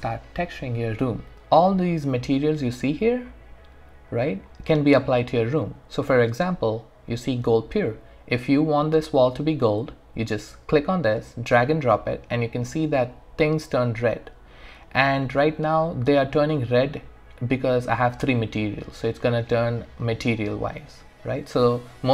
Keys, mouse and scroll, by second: 1.4-4.1 scroll down 1, 4.1-5.5 scroll up 1, 5.5 scroll down 1, 10.9-20.9 drag.